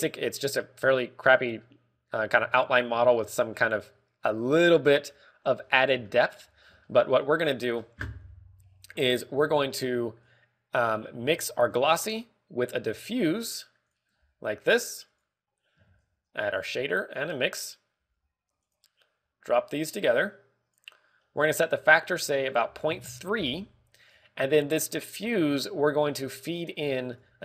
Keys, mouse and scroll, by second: 2.6 middle click, 3.4 KP_1, 4.1 shift+middle click, 4.7 scroll up 3, 5.5-6.1 scroll up 4, 6.0 shift+middle click, 6.6 scroll up 1, 7.0 shift+middle click, 7.5 scroll up 1, 7.8 shift+middle click, 9.9 click, 10.3 scroll up 3, 10.6 middle click, 11.2 click, 12.1 shift+a, 12.7 scroll up 1, 15.1 g, 16.1 click, 16.8 shift+a, 19.0 g, 19.7 click, 20.4 click, 22.1 middle click, 23.0 ctrl+click, 26.4 shift+a.